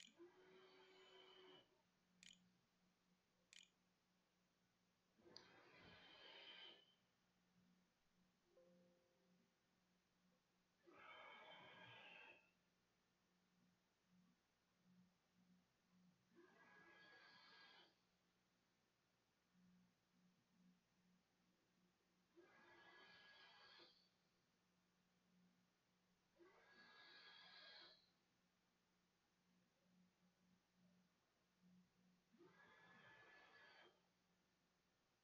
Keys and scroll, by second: 0.0-1.6 typing, 2.6 ctrl+z, 3.0 ctrl+s.